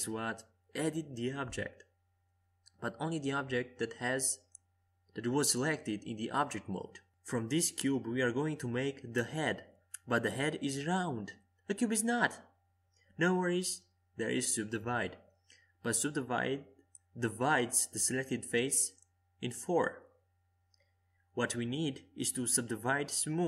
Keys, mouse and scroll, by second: 1.2 u, 4.4 Tab, 5.8 a, 6.2 a, 7.5 w, 10.8 w, 12.6 middle click, 13.5-14.7 drag, 19.6 Tab, 20.6 Tab, 21.3-23.4 middle drag.